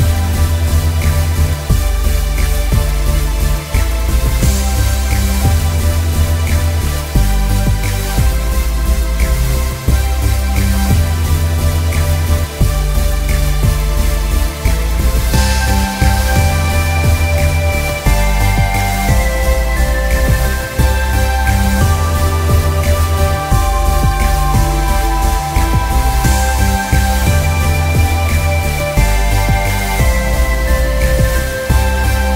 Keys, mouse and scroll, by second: 0.3 click, 1.8 click, 2.6 ctrl+shift+[, 3.4 ctrl+z, 3.8 click, 4.1 ctrl+z, 4.4 click, 6.1 click, 7.7 click, 8.4 click, 8.7 alt+scroll down 1, 9.0 scroll up 1, 10.4 scroll down 1, 10.9 click, 14.0 click, 14.6 scroll up 1, 15.2 click, 15.4 scroll up 1, 15.7 click, 16.1 scroll down 1, 16.5 click, 16.8-18.0 scroll down 3, 17.0 click, 17.6 click, 18.0 click, 18.4-19.1 scroll down 2, 18.7 click, 19.1 click, 21.1 click, 24.0 click, 25.0 click, 26.0 click, 26.3 alt+scroll down 1, 26.5 scroll up 1, 27.2 click, 27.7 ctrl+s, 28.2-28.7 scroll up 1, 28.7 click, 29.3 alt+scroll up 2, 29.6 alt+scroll down 1, 29.9 click, 30.4 alt+scroll up 1, 30.6 click.